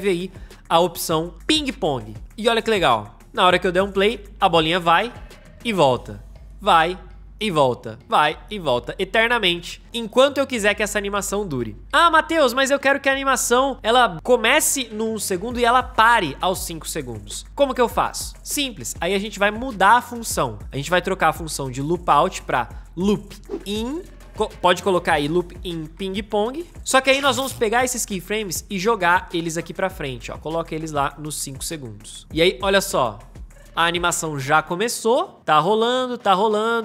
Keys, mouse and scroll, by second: 3.2 Return, 3.7 space, 23.4-27.2 typing, 32.6 space.